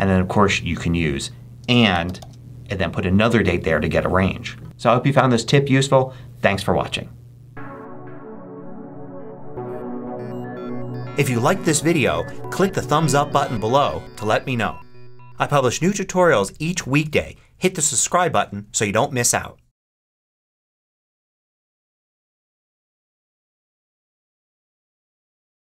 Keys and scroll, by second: 1.5-2.6 typing.